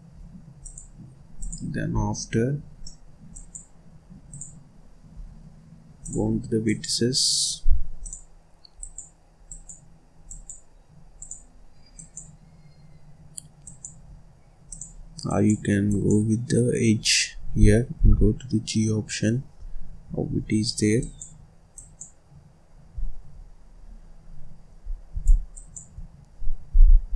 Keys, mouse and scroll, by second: 0.6-1.9 drag, 1.9 scroll down 4, 2.1-2.8 scroll up 1, 2.8 middle click, 3.3 click, 4.3 click, 6.0 click, 6.6 click, 7.4-7.9 scroll up 1, 7.9 click, 8.7 click, 9.4 click, 10.2 click, 11.1 click, 11.9 click, 13.6 click, 14.6 click, 15.2 click, 15.8 click, 16.9-17.3 scroll up 2, 17.3-17.6 scroll down 1, 17.6-18.0 scroll up 1, 18.0 g, 20.9 click, 21.7 click, 25.5 shift+click, 26.7 g.